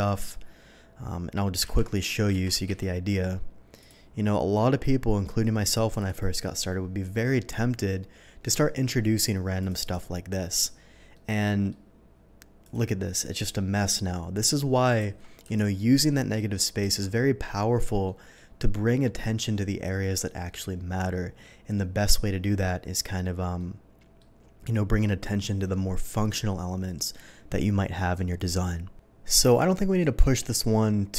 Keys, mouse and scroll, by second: 1.6 ctrl+z, 2.3 ctrl+z, 2.6 d, 2.8 ctrl+z, 3.7 click, 4.5-5.7 drag, 5.9 click, 6.0 click, 7.7-8.4 middle drag, 9.0-9.5 drag, 9.6 click, 9.8 click, 11.1-11.6 middle drag, 12.6 click, 12.9 middle click, 15.0 ctrl+z, 15.5 ctrl+z, 18.0 middle click, 20.4-21.7 middle drag, 22.4 middle drag, 23.5-24.1 middle drag, 29.3 middle click, 29.9 shift+middle drag.